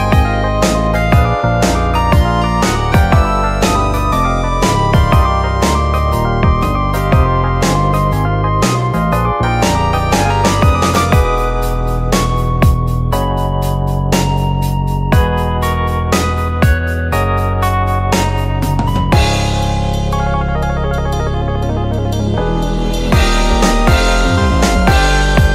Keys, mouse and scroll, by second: 1.6 ctrl+r, 3.0 click, 3.6 click, 4.7 click, 5.2 shift+click, 6.0 j, 6.5 click, 7.1 middle click, 7.6 click, 8.7-9.1 scroll down 1, 9.1-10.5 middle drag, 10.5 click, 11.0 click, 12.4 middle click, 13.1 click, 14.1 click, 14.6 click, 15.9 click, 16.4 click, 17.6-19.0 middle drag, 19.0 click, 19.6 click, 20.6-21.9 middle drag, 21.9 click, 22.7 click, 23.6 click, 24.2 click, 25.3 click.